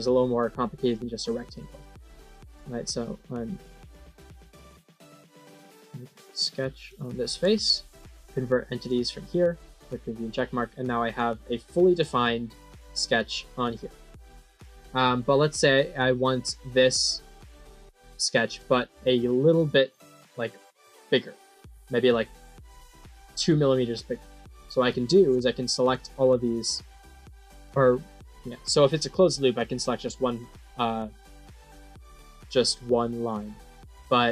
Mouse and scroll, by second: 1.3 middle click, 2.4 click, 4.9 click, 6.0 click, 6.7 click, 7.9 click, 8.7 click, 9.7 click, 11.0 right click, 11.8 click, 12.7 click, 13.6 click, 14.0 click, 15.3-16.3 middle drag, 17.5 click, 18.2 click, 22.7 click, 25.7 click.